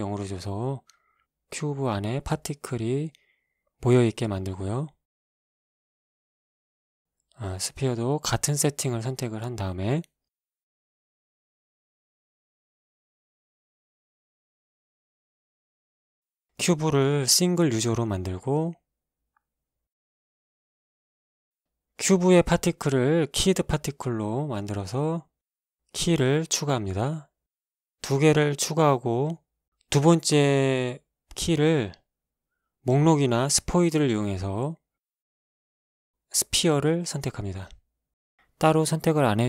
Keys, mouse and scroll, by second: 1.0 alt+a, 3.6 Escape, 4.2 right click, 5.6-7.0 drag, 9.1 click, 10.2 click, 11.9 click, 13.2 alt+a, 15.1 Escape, 15.8 right click, 18.2 click, 22.2 scroll down 2, 22.9-23.2 scroll down 1, 23.4-23.9 scroll down 2, 24.1 click, 26.7 click, 27.9-28.4 scroll down 2, 29.1 click, 31.7-32.7 drag, 34.0 Escape, 34.8-35.8 middle drag, 35.8 click, 37.3 click.